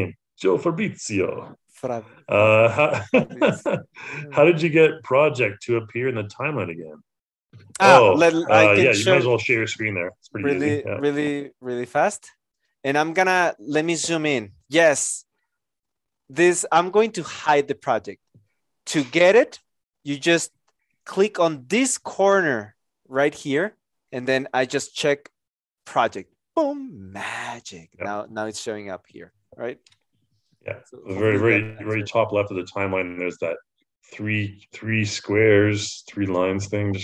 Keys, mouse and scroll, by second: 12.2 Return.